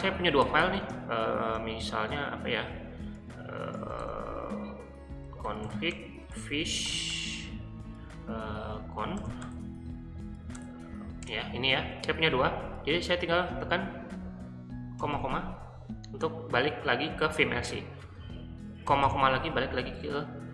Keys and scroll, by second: 0.0-1.1 typing, 3.0-7.3 typing, 8.4-9.7 typing, 10.5 Tab, 11.2 Return, 15.0 typing, 18.9 typing.